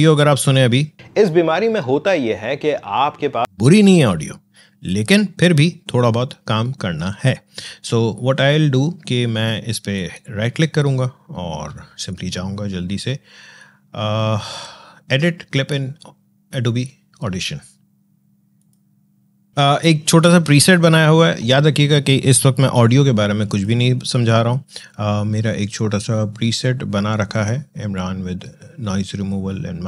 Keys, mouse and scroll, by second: 0.9 space, 3.4 space, 9.8 right click, 19.1 click, 19.5 space, 23.4 click.